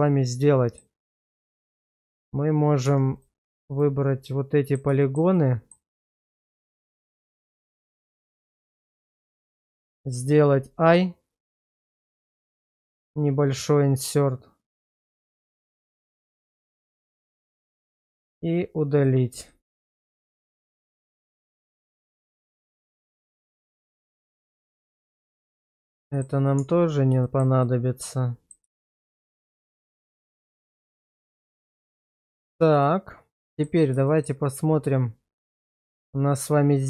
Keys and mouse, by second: 0.0-0.8 middle drag, 1.6 Tab, 2.8 Tab, 4.2 middle click, 5.0 shift+middle click, 5.3 middle click, 6.5 middle click, 7.0 middle click, 8.0 shift+middle click, 8.4 middle click, 9.4 shift+middle click, 11.5 i, 16.7 click, 18.0 x, 19.5 middle click, 20.5 middle click, 21.7 shift+middle click, 22.1 middle click, 22.7 shift+middle click, 23.3 Tab, 23.9 click, 24.3 middle click, 25.5 ctrl+x, 26.1 shift+middle click, 26.6 Tab, 27.2 shift+middle click, 27.6-28.5 middle drag, 28.7 shift+middle click, 29.5-31.2 middle drag, 31.4 shift+middle drag, 32.3 shift+middle drag, 32.8-33.6 middle drag, 34.1 shift+middle drag.